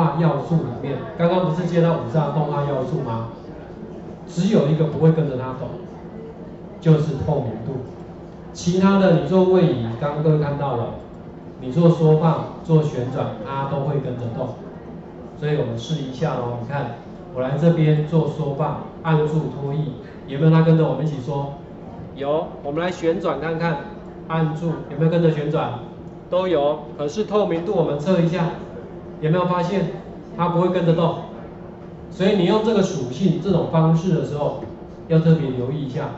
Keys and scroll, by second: 1.5 ctrl+4, 1.7 ctrl+4, 15.9 ctrl+4, 22.9 ctrl+z, 27.0 ctrl+z.